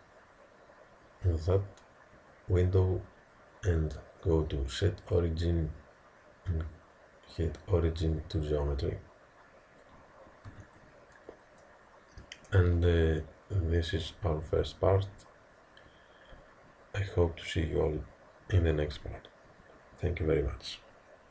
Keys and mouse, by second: 5.1-8.5 drag, 10.5 t.